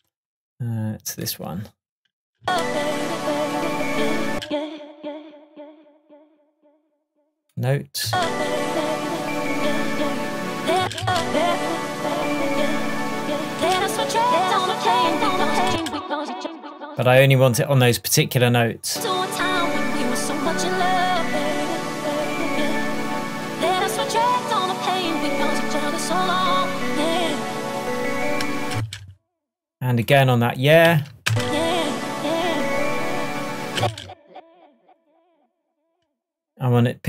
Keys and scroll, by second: 2.4 space, 4.3 space, 8.1 space, 10.8 space, 13.6 space, 15.7 space, 33.8 space.